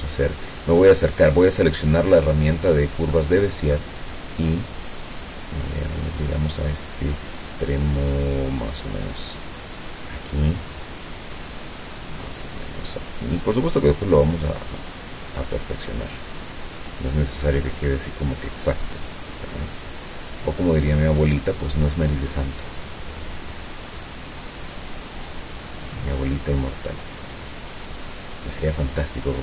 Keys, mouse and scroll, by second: 0.0 ctrl+scroll up 2, 3.2 middle click, 10.1 click, 12.0 click, 17.1 middle click, 17.1 scroll up 1, 26.8 click, 28.1 click.